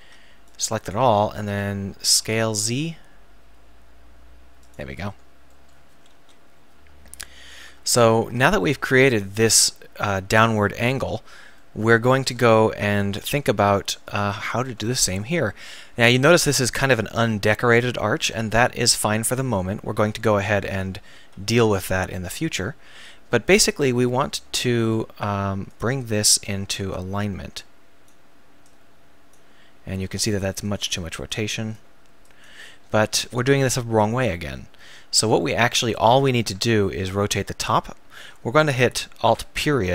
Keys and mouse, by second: 0.0 b, 2.2 s, 4.7 click, 5.1 middle click, 6.1 KP_1, 7.7 Tab, 8.2 z, 14.0-14.6 drag, 14.6 Tab, 15.7 KP_1, 18.4 KP_1, 20.7 z, 21.2 a, 21.5 b, 24.8 r, 26.8-28.1 drag, 28.1-30.1 right drag, 30.1 r, 31.3-32.4 drag, 32.6-32.9 ctrl+z, 33.3 ctrl+z, 33.7 ctrl+z, 34.3 ctrl+z, 35.3 a, 36.5 b, 39.3 alt+..